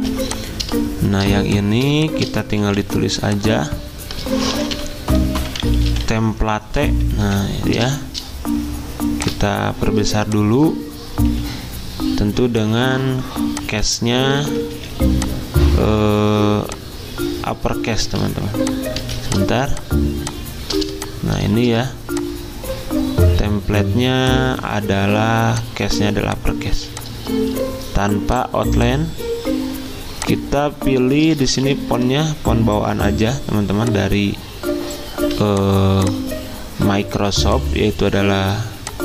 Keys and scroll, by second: 0.1 z, 2.6 t, 4.3-6.4 typing, 7.3 Escape, 11.3 d, 14.7 Escape, 18.3 z, 19.0 z, 20.5 typing, 21.7 typing, 26.7 z, 31.0-32.1 typing.